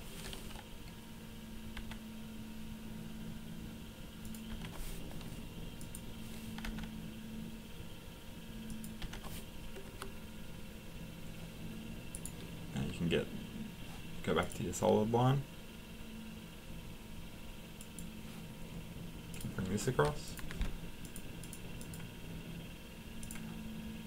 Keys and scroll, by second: 2.6 Delete, 4.5 Delete, 6.6 Delete, 9.0 Delete, 20.5 Escape.